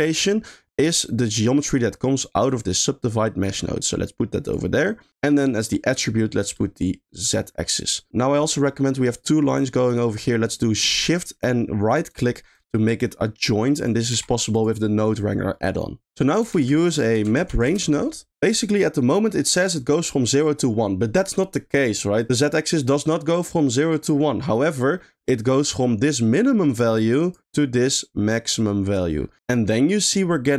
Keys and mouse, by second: 0.1 middle click, 1.3 g, 1.6 click, 2.5-4.1 drag, 4.4 click, 5.1 middle click, 6.6-7.3 drag, 8.5 middle click, 12.1 shift+click, 13.6 drag, 14.1 g, 16.5 shift+a, 24.9 middle click, 26.0 click, 26.2-27.3 drag, 27.9-28.9 drag.